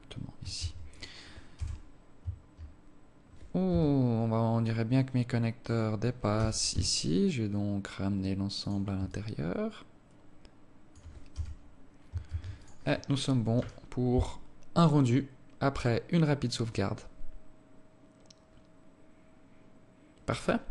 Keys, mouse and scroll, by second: 0.0 scroll down 5, 0.8 ctrl+s, 1.8 KP_0, 4.0 KP_3, 6.0 right click, 6.6 g, 9.4 alt+click, 11.6 KP_0, 12.6 ctrl+s.